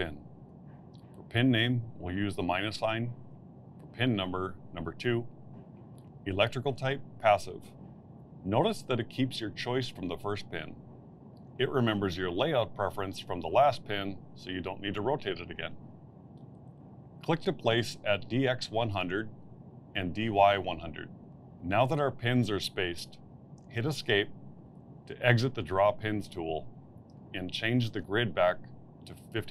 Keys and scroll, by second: 2.9 -, 4.7 2, 25.5 Escape.